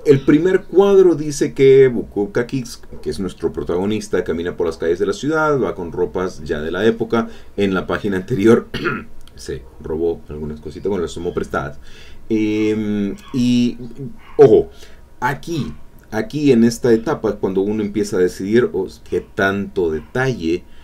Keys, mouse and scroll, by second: 0.0 click, 0.5 click, 13.7 click, 15.6 alt+Tab, 16.3 click.